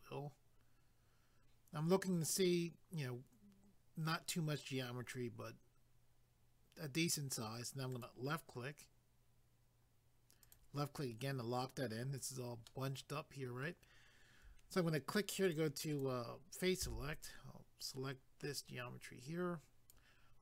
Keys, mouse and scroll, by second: 0.9-2.2 scroll up 1, 7.9 click, 10.4 click, 12.7 middle click, 15.4 click, 15.9 click, 16.0 double click, 16.8 c, 17.2 click.